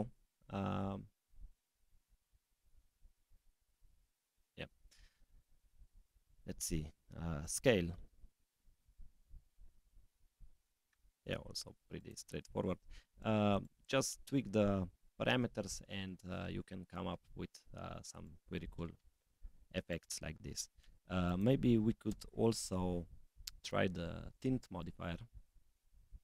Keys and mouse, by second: 3.9 click, 7.4-8.9 drag, 9.9-11.3 drag, 12.0-13.7 drag, 14.1 click, 18.3 click, 19.8-20.9 drag, 21.2-22.4 drag, 24.8-26.2 drag.